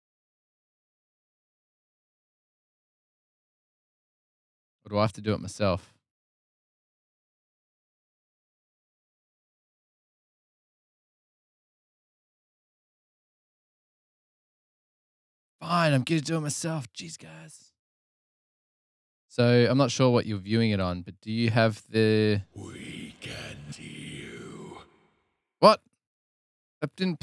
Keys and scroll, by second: 12.3 super+Tab, 16.3 Return, 16.3 typing, 26.5 super+Tab.